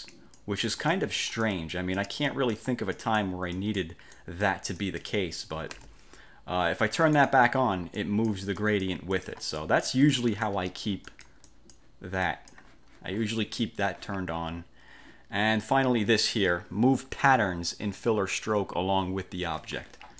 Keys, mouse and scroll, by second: 2.4 click, 3.1 click, 3.7 click, 4.3 click, 4.9 click, 5.9 ctrl+z, 7.3 click, 8.1 click, 8.7 click, 9.7 click, 11.1-12.1 drag, 12.4 click.